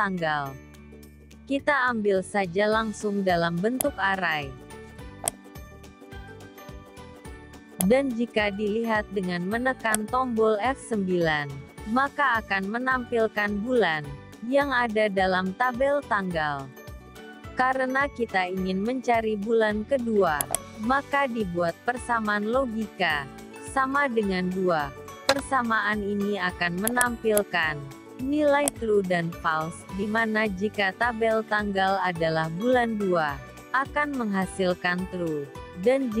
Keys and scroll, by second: 9.7 F9.